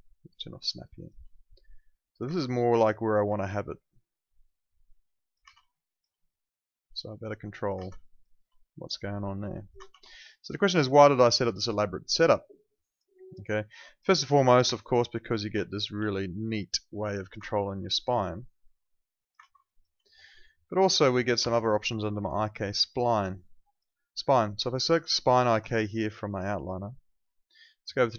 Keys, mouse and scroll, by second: 1.0 alt+click, 2.2 ctrl+z, 2.6 alt+middle click, 2.8 alt+right click, 3.0 alt+click, 3.3 e, 4.4 click, 5.5 z, 5.7 alt+click, 7.8 z, 8.0 alt+click, 8.2 alt+right click, 9.1 click, 9.7 ctrl+z, 10.2 alt+click, 10.5 alt+right click, 10.7 alt+middle click, 11.0 alt+right click, 11.8 alt+middle click, 12.0 alt+right click, 12.3 alt+click, 13.1 alt+right click, 13.4 alt+middle click, 13.6 alt+right click, 13.8 alt+click, 14.6 F9, 15.1 click, 15.7 alt+click, 15.9 w, 16.4 click, 17.7 click, 19.5 z, 19.6 alt+click, 21.4 F8, 23.3 click.